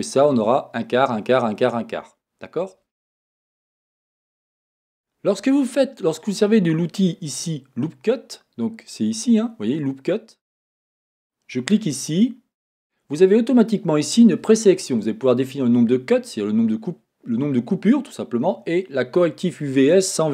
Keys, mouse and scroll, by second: 11.1-20.3 drag.